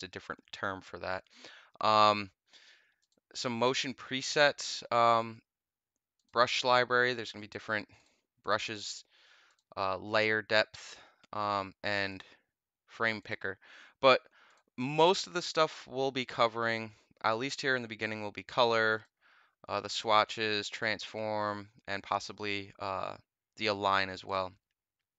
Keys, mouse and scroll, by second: 2.9 click, 6.1 click, 7.4 click, 7.9 click, 8.3 click, 9.4 click, 12.0 click, 13.1 click, 14.4 click, 17.6 click, 18.8 click, 20.0 click, 21.0 click, 24.2 click.